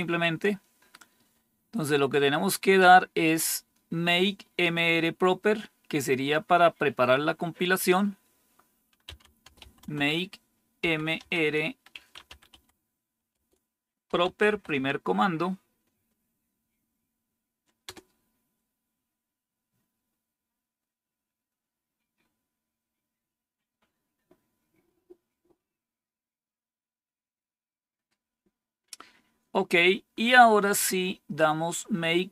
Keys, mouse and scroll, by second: 0.7-1.8 scroll down 1, 1.8 scroll down 1, 2.6 scroll down 2, 7.6 click, 8.7-14.9 typing, 17.7 Return.